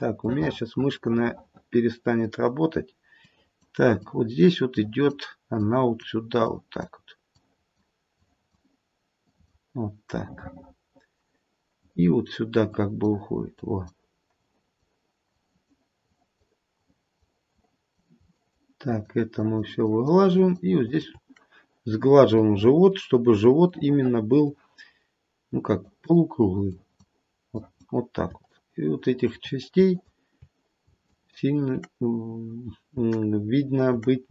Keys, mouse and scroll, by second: 0.2 middle click, 1.2 middle click, 3.2 click, 4.0 click, 5.7 click, 6.4 click, 7.3 click, 8.2 click, 9.2 click, 10.1 middle click, 11.8 click, 12.6 click, 13.5 click, 14.4 click, 15.3 click, 16.0 click, 16.7 click, 17.5 click, 18.3 shift+click, 18.8 shift+click, 19.3 shift+click, 19.8 shift+click, 20.3 shift+click, 20.9 shift+click, 23.7 middle click, 24.1 middle click, 25.8 click, 26.6 click, 27.5 click, 28.5 shift+click, 30.2 click, 31.0 shift+click.